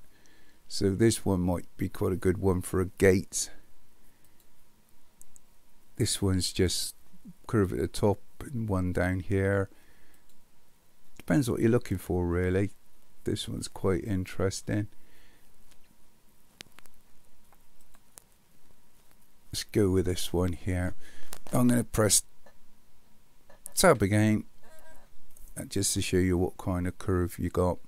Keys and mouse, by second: 4.3 click, 10.3 click, 17.8 click, 23.8 Tab.